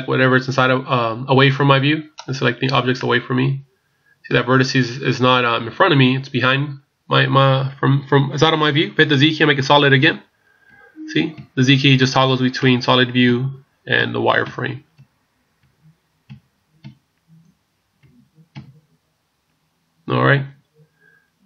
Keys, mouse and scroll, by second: 2.2 right click, 2.9 middle click, 9.7 z, 10.7-21.4 z.